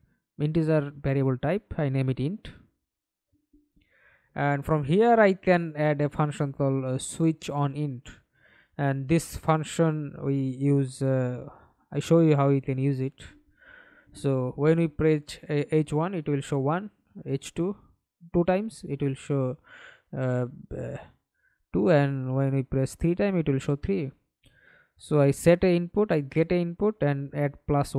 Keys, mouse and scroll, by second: 1.2-4.2 typing, 4.5 Return, 8.0 double click, 11.0 double click, 13.9-14.9 scroll up 3, 14.9-16.3 scroll up 1, 17.6 ], 17.6 Return, 22.9 1, 23.2 Return, 24.6 right click.